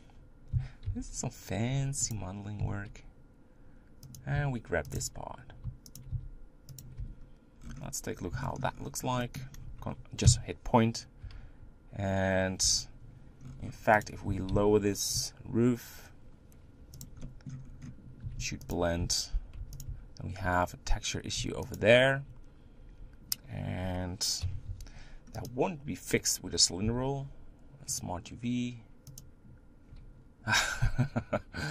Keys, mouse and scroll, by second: 0.5 s, 2.6 g, 4.4 s, 4.9 g, 6.1 s, 7.0 Tab, 7.6-8.4 scroll down 6, 8.4 shift+middle click, 8.7-9.0 scroll up 7, 9.2-10.2 middle drag, 10.2 KP_Decimal, 11.2 Tab, 12.6 Tab, 13.4-14.1 scroll down 5, 14.1 click, 14.2 g, 17.2 middle click, 17.7-18.2 scroll up 3, 18.2 s, 19.0 Tab, 19.6 Tab, 19.7 click, 20.0 Tab, 21.8 alt+shift+click, 24.4 KP_7, 24.6 u, 29.2 u.